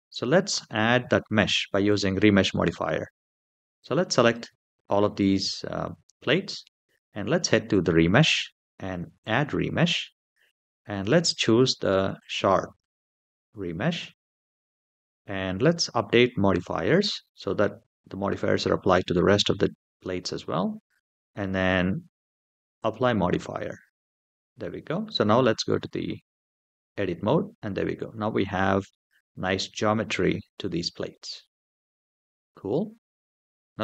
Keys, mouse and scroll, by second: 0.3 Tab, 1.6 click, 3.6 click, 7.5 click, 9.0 click, 12.0 click, 13.8-15.0 scroll down 3, 16.3 click, 22.5 click, 26.6 Tab, 27.4-28.7 middle drag, 29.2 scroll up 2, 29.7-30.9 middle drag, 31.0 scroll down 2, 31.7 Tab.